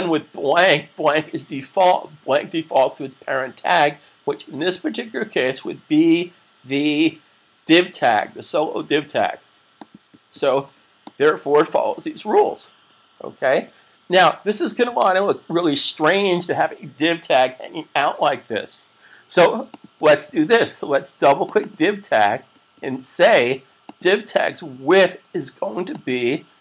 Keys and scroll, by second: 11.7 super+s.